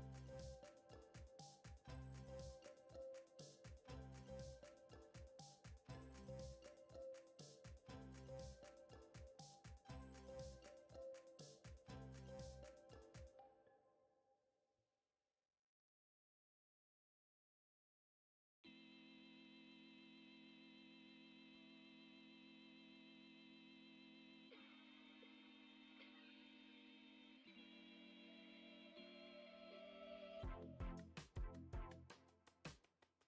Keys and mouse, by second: 0.5 ctrl+Tab, 1.9 KP_2, 2.2 KP_1, 2.9 shift+middle drag, 3.8 Tab, 4.5 alt+z, 4.9-5.7 drag, 5.9 x, 6.6 alt+z, 7.0 Tab, 10.8-12.1 drag, 13.2 click, 14.1 Tab, 15.3 click, 15.7 x, 17.5 click, 18.1-19.6 right drag, 20.6 o, 21.9 s, 24.3 s, 25.5 middle click, 26.4 g, 29.4 middle click, 29.8 e, 31.5 s.